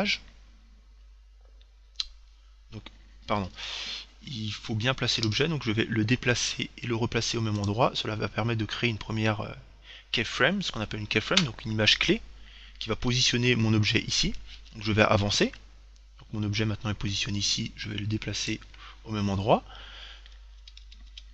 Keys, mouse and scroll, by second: 1.9 Right, 3.5 Left, 5.5 g, 7.9-9.6 drag, 14.8 Right, 17.8 g, 18.8-20.3 drag, 20.9 Right.